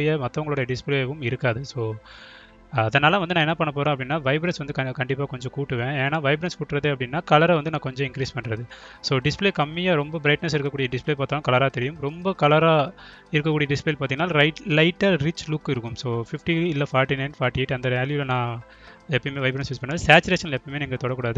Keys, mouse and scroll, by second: 5.1 click, 8.4 click, 11.3 click, 14.1 click, 20.3 click.